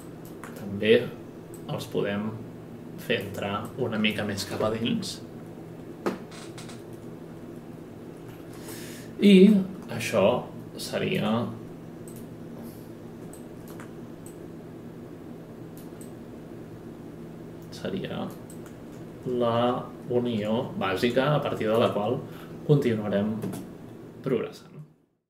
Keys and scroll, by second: 23.4 space.